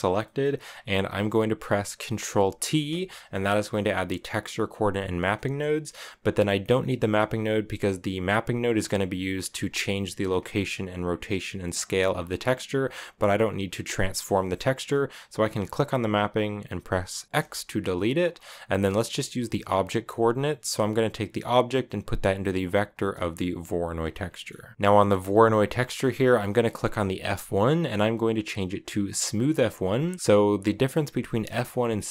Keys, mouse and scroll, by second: 0.0-1.4 middle drag, 1.4-2.2 scroll down 1, 2.4 ctrl+t, 2.7 scroll down 1, 2.8 middle click, 3.3 a, 5.1-6.3 middle drag, 6.3 click, 7.9-9.2 drag, 10.8 click, 13.8-17.2 drag, 17.2 x, 18.0-24.0 drag, 24.0 scroll down 1, 24.1 middle click, 24.7 click, 25.2 middle drag, 25.4 scroll up 1, 25.6 middle click, 25.8-26.9 scroll down 4, 26.9-29.9 drag, 30.1-30.5 scroll up 4, 30.5-32.1 drag.